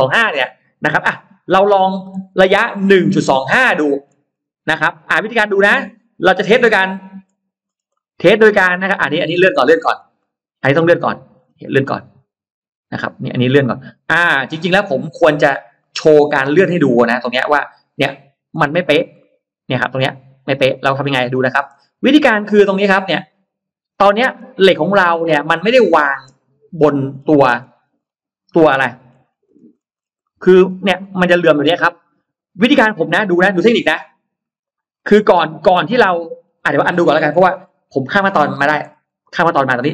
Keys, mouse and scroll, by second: 1.6 shift+right click, 2.0 shift+right click, 2.6 middle click, 3.0 middle click, 3.6-4.0 scroll down 1, 4.2-4.8 scroll up 1, 5.4 scroll up 1, 5.6-7.0 middle drag, 7.2 scroll down 1, 7.6 scroll up 1, 7.8-9.1 middle drag, 9.4-10.2 scroll up 2, 10.0 middle click, 10.9 click, 11.2 scroll up 2, 11.6-14.0 middle drag, 14.0-15.6 scroll down 6, 15.8 middle click, 16.6-17.8 scroll up 4, 17.5 middle click, 18.4-18.7 scroll down 1, 18.8 scroll up 1, 19.0-21.4 middle drag, 21.8-22.4 scroll up 1, 22.6-24.2 middle drag, 24.4 scroll up 1, 24.6-26.0 middle drag, 26.3 click, 27.0-28.1 scroll down 3, 28.4 middle click, 28.9-29.2 scroll down 1, 29.4-30.1 scroll up 2, 30.1 middle click, 30.7 scroll up 2, 31.0-32.4 middle drag, 32.5-33.5 scroll down 4, 34.5 click, 34.8-35.8 scroll up 2, 36.2 scroll down 1, 36.4-37.5 scroll up 3, 36.4 middle click, 37.8 ctrl+z, 38.0 ctrl+z, 38.4 ctrl+z, 38.6 ctrl+z, 39.2 ctrl+z.